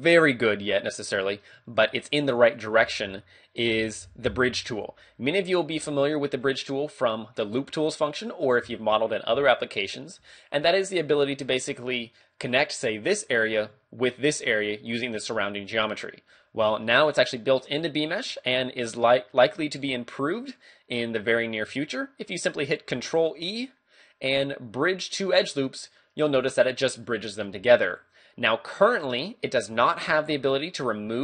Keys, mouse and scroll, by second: 1.8 ctrl+Tab, 2.6 right click, 2.8 shift+d, 5.5 click, 5.8 w, 7.7 scroll down 2, 8.2 middle click, 8.7-9.2 scroll up 2, 10.2 a, 12.5 right click, 14.1 shift+right click, 16.9 shift+middle click, 18.3 middle click, 19.3 middle click, 22.8 middle click, 23.0 ctrl+e, 26.0 middle click, 27.1 middle click, 27.6 z, 29.8 middle click, 30.8 middle click.